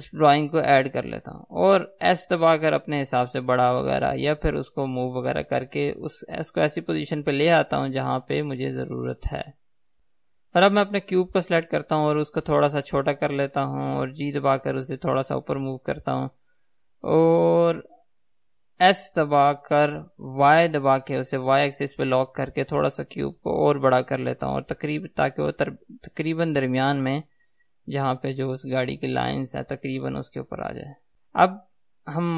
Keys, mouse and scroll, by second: 0.0 click, 2.5 s, 4.1 click, 4.9 g, 10.1 right click, 10.9 click, 12.7 s, 13.9 click, 14.9 g, 18.9 click, 19.9 s, 27.1 click, 30.5 g, 31.2 z.